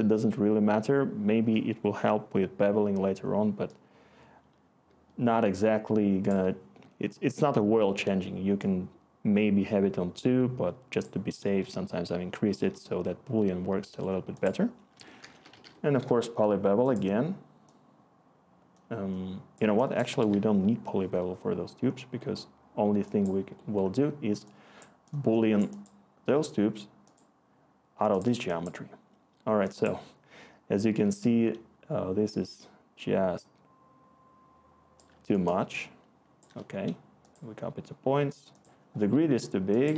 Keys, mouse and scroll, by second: 14.9 Tab, 15.5 typing, 16.0 Delete, 39.9 1.